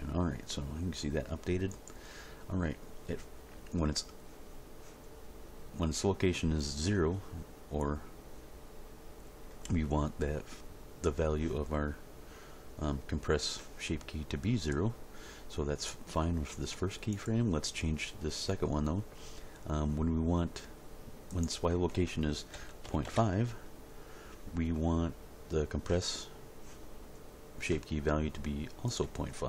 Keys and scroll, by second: 22.6 ., 22.8 5, 23.0 Return.